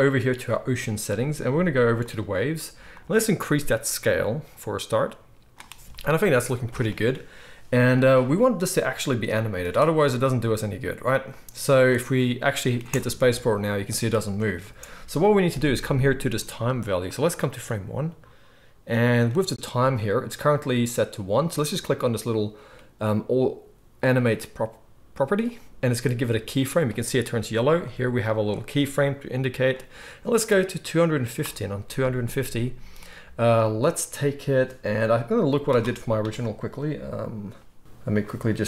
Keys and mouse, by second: 2.0-4.6 drag, 2.0-4.6 middle drag, 12.8 space, 14.6 space, 25.5-27.8 drag.